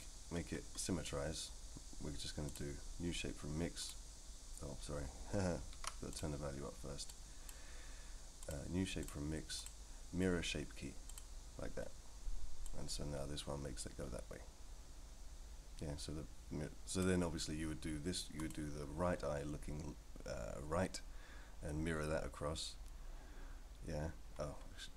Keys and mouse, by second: 2.6-3.9 drag, 5.7 ctrl+z, 6.1 click, 7.1 click, 8.5-9.0 drag, 9.7-11.2 drag, 12.7-17.0 drag, 18.4 click.